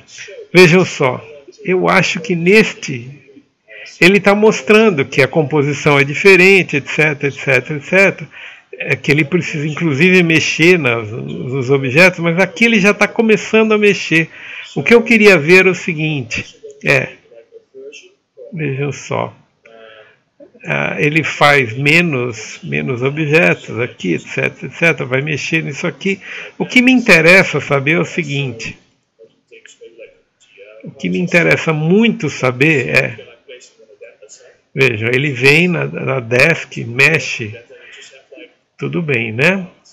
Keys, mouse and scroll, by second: 3.0 right click, 7.3 middle click, 9.0 scroll up 1, 9.3 alt+middle click, 10.0 Tab, 11.5 right click, 11.9 alt+middle click, 13.1 typing, 17.2 right click, 17.9-19.6 typing, 21.9 c, 22.5 ctrl+v, 22.8 scroll up 1.